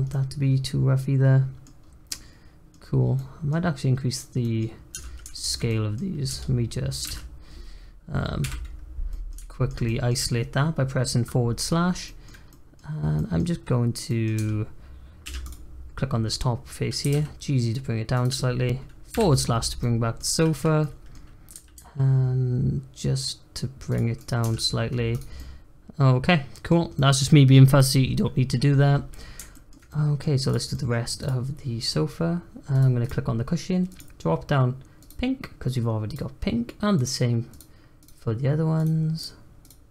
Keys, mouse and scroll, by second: 0.1-1.8 middle drag, 1.8 scroll down 1, 2.1 middle click, 2.7-3.1 scroll up 2, 3.1 middle click, 3.6-4.1 scroll up 1, 4.1 click, 4.4 middle click, 4.9 Tab, 5.3 shift+middle click, 6.2 Tab, 7.0 alt+z, 8.4 /, 9.1-11.6 middle drag, 11.6-12.0 scroll up 4, 12.0-14.3 middle drag, 14.3 Tab, 15.3 3, 15.4 click, 17.0 g, 19.1 /, 19.8 middle click, 20.3-20.7 scroll up 1, 20.8 middle click, 21.5 g, 24.1 click, 24.4 Tab, 24.6-25.1 scroll down 3, 25.1 click, 25.4-26.6 middle drag, 26.6 scroll down 1, 26.9-28.9 middle drag, 28.9-29.5 scroll up 1, 29.5 shift+middle click, 30.4 click, 30.7 middle click, 31.1 click, 32.7 click, 33.0 click, 33.9-36.1 drag, 36.9-38.0 drag, 38.7 click.